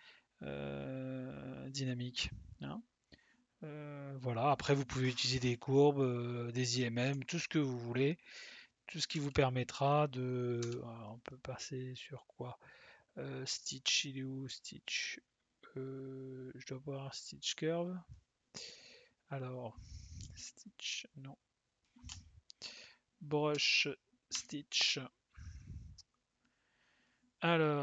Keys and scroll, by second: 10.6 c, 20.2 s, 22.0 Escape, 23.5 b.